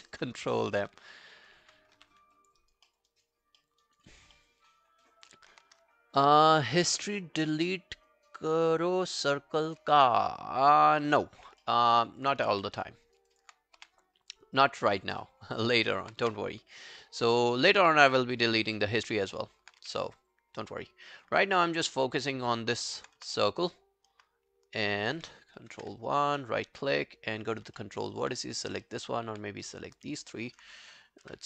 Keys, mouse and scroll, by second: 0.0 alt+right click, 0.3 alt+click, 0.7 e, 1.1 alt+middle click, 1.4 alt+right click, 2.0 r, 2.4 alt+click, 2.6 alt+right click, 2.9 alt+middle click, 3.1 alt+right click, 3.6 alt+middle click, 3.8 alt+right click, 4.4 alt+middle click, 5.1 alt+click, 11.6 alt+middle click, 12.0 alt+scroll down 1, 12.2 alt+click, 12.5 w, 12.9 alt+middle click, 13.1 alt+right click, 13.3 alt+click, 13.8 w, 15.2 alt+middle click, 15.6 alt+click, 15.9 alt+right click, 16.3 space, 17.9 space, 18.8 alt+middle click, 19.2 alt+scroll down 2, 19.4 alt+middle click, 19.7 alt+scroll up 2, 19.8 w, 22.8 alt+middle click, 23.0 alt+right click, 23.2 space, 24.2 space, 24.8 alt+middle click, 25.9 ctrl+i, 26.0 alt+click, 26.7 right click, 27.8 alt+middle click, 28.0 alt+right click, 28.8 alt+middle click, 29.1 alt+click, 30.2 alt+middle click.